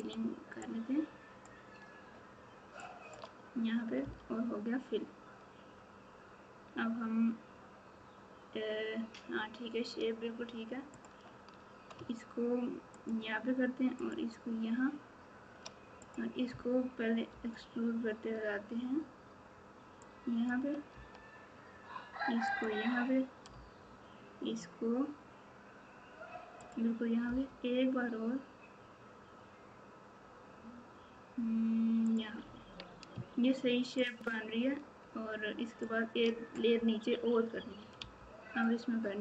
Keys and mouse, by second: 27.2 e, 34.0-35.8 shift+drag.